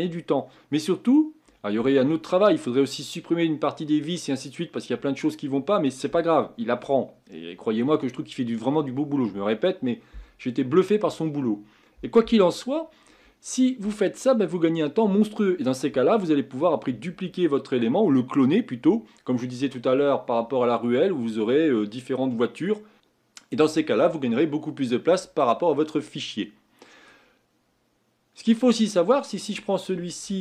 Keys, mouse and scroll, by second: 26.4-28.8 middle drag, 28.8-29.4 scroll up 1, 29.4 click, 30.3-30.4 shift+middle drag.